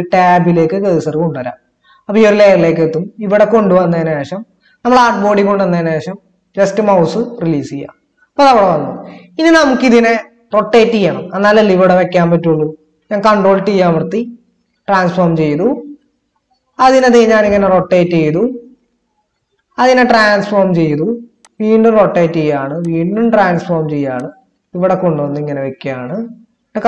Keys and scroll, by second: 13.9 ctrl+t.